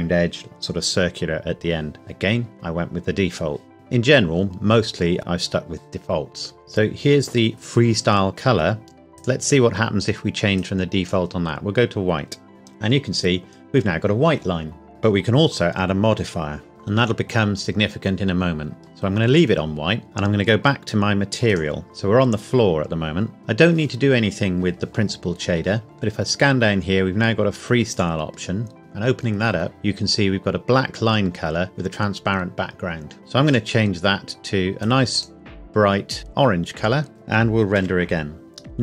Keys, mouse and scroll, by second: 3.0 scroll down 1, 3.7 click, 9.1 click, 14.9 scroll down 1, 20.0 click, 21.5 click, 23.6 scroll down 1, 24.7-25.6 scroll up 1, 25.6 scroll down 1, 27.9 click, 33.4 click, 37.8 F12.